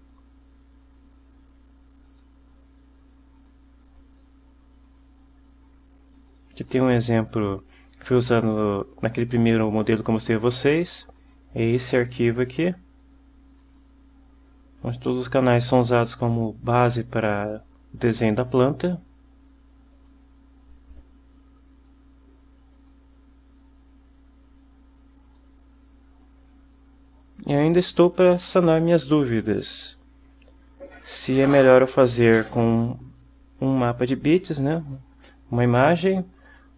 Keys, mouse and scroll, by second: 0.9 click, 3.4 click, 4.9 click, 6.2 click, 6.7 click, 11.1 click, 13.6 click, 20.0 click, 22.8 click, 25.4 click, 26.3-27.5 drag, 36.0 click, 36.6 click.